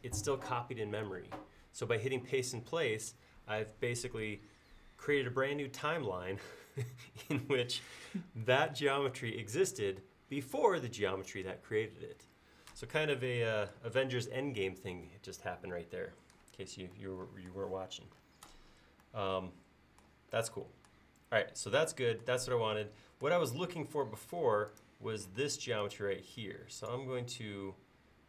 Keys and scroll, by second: 25.4 space.